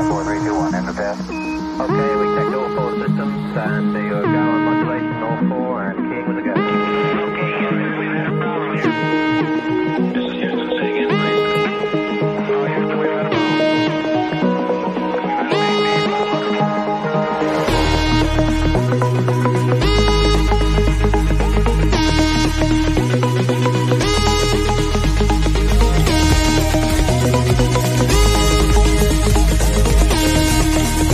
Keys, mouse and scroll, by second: 0.7-1.9 shift+middle drag, 1.9 scroll down 1, 2.5 click, 3.8 click, 6.2 click, 15.4 middle click, 16.4-16.8 scroll up 1, 16.8 middle click, 16.9-22.0 middle drag.